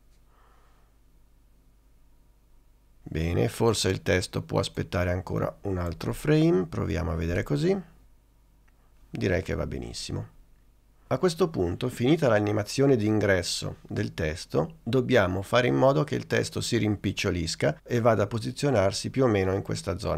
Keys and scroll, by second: 7.4 space.